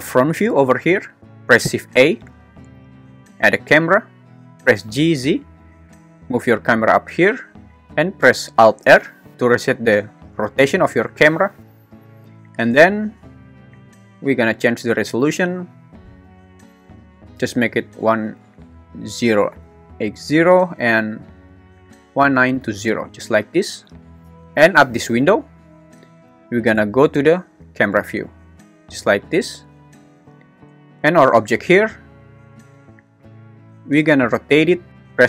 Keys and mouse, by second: 1.6 shift+a, 4.8 g, 5.2 z, 8.8 alt+r, 15.9-20.8 drag, 21.7-22.9 drag, 33.4 `, 34.5-35.2 typing, 34.9 Escape.